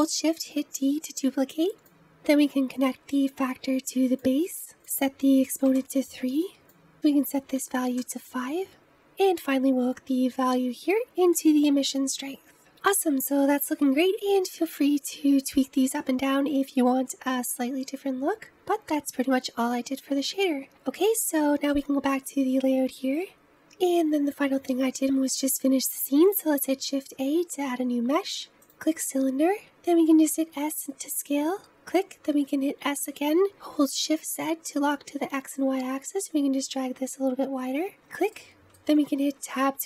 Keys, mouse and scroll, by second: 0.0 shift+d, 2.8 click, 4.8-6.5 drag, 6.9-8.8 drag, 9.2 click, 21.9 click, 23.4-25.0 scroll down 1, 25.0-25.3 scroll down 1, 29.4 scroll down 3, 30.0 s, 32.8 s, 38.3-39.3 middle drag, 39.3 Tab.